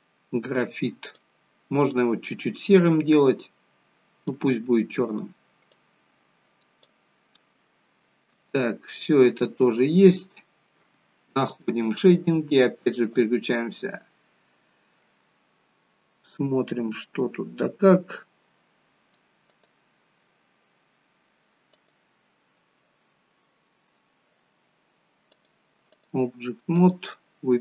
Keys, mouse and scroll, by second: 1.4 middle click, 2.9 click, 5.8 click, 7.7 shift+middle click, 8.6 middle click.